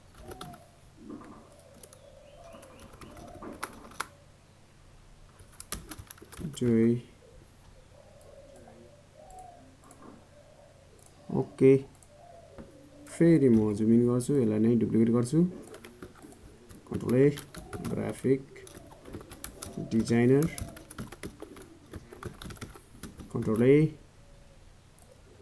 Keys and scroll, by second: 18.9 ctrl+a.